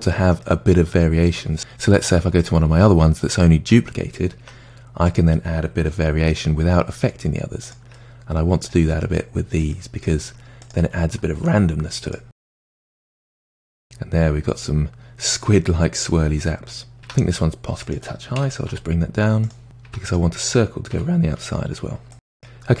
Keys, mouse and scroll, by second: 0.4-2.0 middle drag, 2.0 Tab, 2.4 click, 4.4 Tab, 5.1 click, 5.9 g, 8.0-8.9 middle drag, 8.9-9.8 scroll up 3, 9.8-10.2 middle drag, 10.2 Tab, 10.6 click, 11.5 Tab, 12.1 click, 12.3 middle click, 12.4 g, 12.9 middle drag, 13.1 Tab, 13.2 click, 13.3 Tab, 13.5 g, 13.7-15.9 middle drag, 15.9-17.0 scroll down 2, 17.4 click, 17.7 g, 18.4-19.3 middle drag, 19.3 Tab, 19.4 click, 19.8 g, 20.8 Tab, 21.1 click, 21.4 g, 21.8 Tab, 22.0-22.8 middle drag.